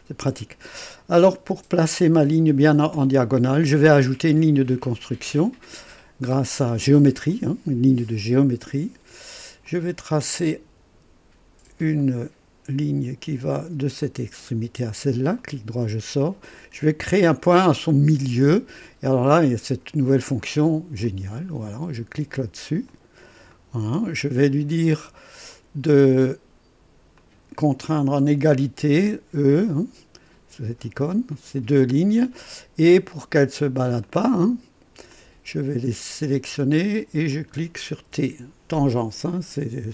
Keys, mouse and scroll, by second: 7.3 click, 9.6 click, 12.0 click, 14.0 click, 15.3 right click, 21.0 click, 22.8 click, 23.5 right click, 25.5 click, 27.1 click, 30.9 e, 34.0-35.1 drag, 35.3 click, 36.2 click, 37.3 click, 38.1 typing.